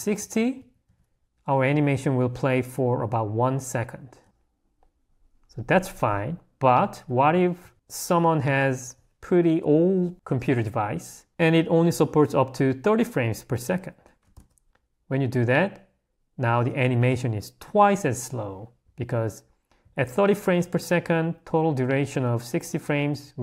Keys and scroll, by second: 4.2 Escape, 8.3 h, 14.4 Escape, 21.4 l, 22.6 h.